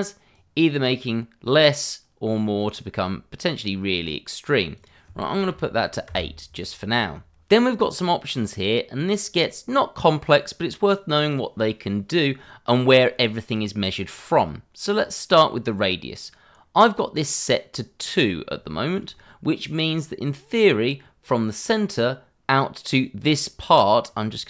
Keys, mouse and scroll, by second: 0.3 click, 5.5 8, 6.0 Return, 16.6-18.5 scroll up 1, 18.7 shift+middle click, 19.0 scroll up 1, 23.5 scroll up 1.